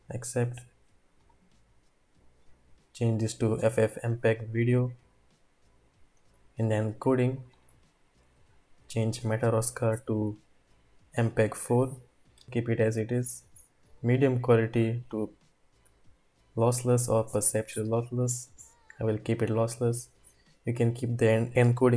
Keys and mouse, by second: 3.8 click, 6.7 click, 9.1-11.2 drag, 13.9-19.7 drag.